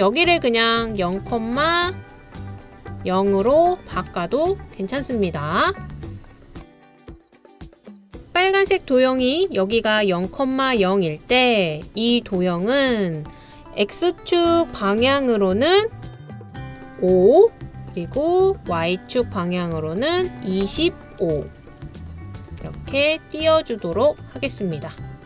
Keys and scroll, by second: 0.9-1.5 typing, 3.3-4.0 typing, 6.5 typing, 18.1 typing, 21.0-23.1 typing, 24.9-25.2 typing.